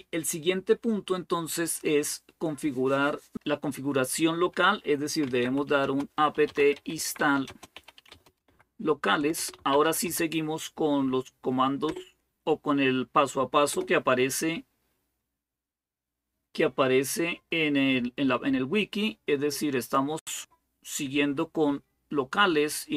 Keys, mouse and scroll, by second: 4.8-10.3 typing, 11.7 Return, 13.5 Return, 15.7 typing, 19.6 click.